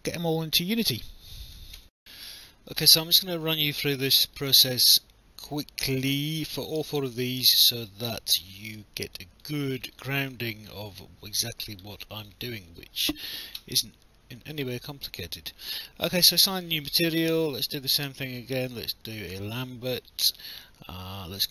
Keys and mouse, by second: 1.8 alt+F9, 2.8 alt+click, 4.5 alt+click, 6.6 alt+middle click, 7.9 alt+click, 8.5 alt+middle click, 9.1 alt+click, 10.3 alt+click, 11.3 alt+middle click, 12.0 alt+click, 13.9 right click, 19.3 click, 21.3 click.